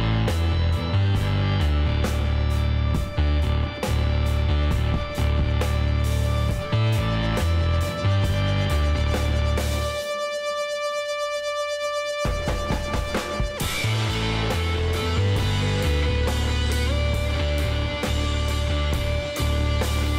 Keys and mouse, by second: 3.9-5.0 drag, 4.1 Tab, 5.0 middle click, 8.6-15.9 drag, 15.9-18.6 middle drag, 18.6-20.1 drag.